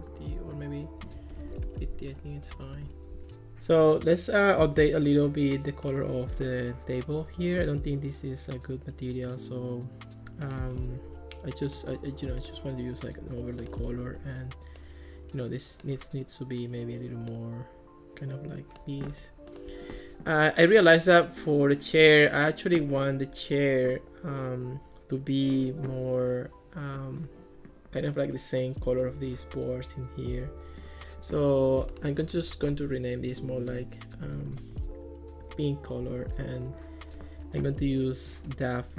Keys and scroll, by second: 1.1-2.5 typing, 2.8 Return, 33.3-35.3 typing, 35.4 Return.